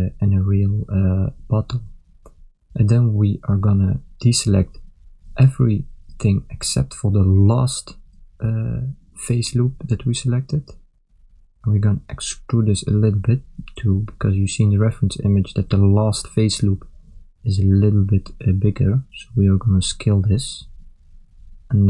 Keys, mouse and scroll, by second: 0.0 Tab.